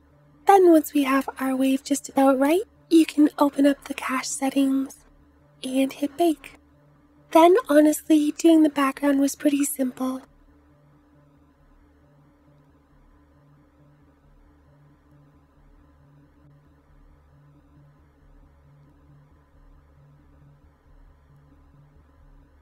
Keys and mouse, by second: 0.0 space, 0.9 space, 7.5 ctrl+click, 7.5 ctrl+right click, 10.3-11.5 drag, 10.3 right click, 10.7 middle click, 10.7 right click, 11.2-17.6 typing, 11.7 click, 12.6 click, 12.6 middle click, 12.6 right click, 13.0 click, 13.0 middle click, 13.0 right click, 13.1 ctrl+alt+KP_0, 13.2 middle click, 13.3 click, 13.6 middle click, 13.9 middle click, 14.1 middle click, 14.3 middle click, 14.7 ctrl+s, 14.7 click, 15.4 click, 15.5 click, 15.7 click, 16.0 click, 16.5 ctrl+z, 16.8 click, 17.0 click, 17.2 ctrl+click, 17.4 ctrl+KP_Add, 17.8 click, 18.0 ctrl+z, 18.2-19.5 alt+drag, 18.8 g, 19.0 Tab, 19.2 g, 19.3 g, 19.5 Tab, 19.9 click, 20.0 ctrl+KP_Add, 20.0 ctrl+KP_Add, 20.1 click, 20.1 right click, 20.3 ctrl+z, 20.6 ctrl+KP_Add, 20.7 ctrl+KP_Subtract, 20.9 ctrl+KP_Add, 21.1 Tab, 21.1 click, 21.3-22.6 typing, 21.5 click, 21.5 right click, 21.7 middle click, 21.9 click, 21.9 right click, 22.2-22.6 drag, 22.4 middle click, 22.4 right click.